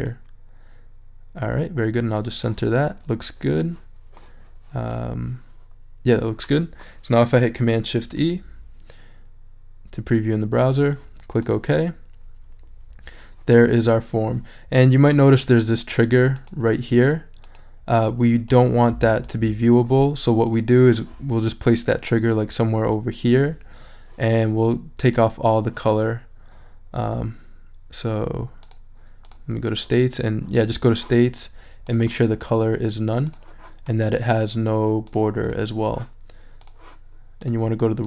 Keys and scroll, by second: 7.9 shift+super+e.